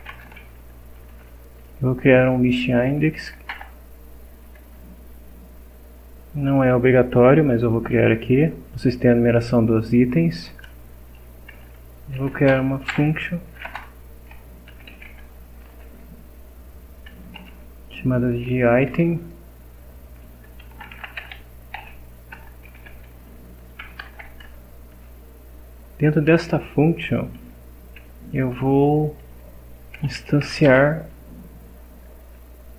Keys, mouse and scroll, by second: 0.0-0.8 typing, 3.5 Return, 10.6 Return, 11.9-17.4 typing, 18.6 shift+9, 20.2-24.1 typing, 24.4 shift+Return, 29.7-30.9 typing.